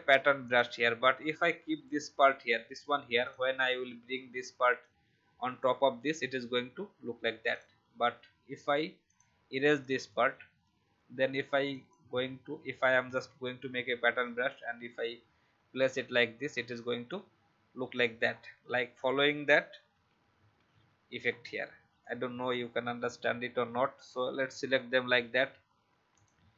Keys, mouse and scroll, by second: 4.3 click, 4.7 alt+click, 7.5 click, 8.4 ctrl+z, 9.0 click, 10.9 Delete, 11.7 click, 13.0-17.0 alt+drag, 18.2-19.4 alt+scroll down 1, 19.9 ctrl+d, 20.7 ctrl+d, 21.3-21.6 alt+scroll down 1, 22.0 click.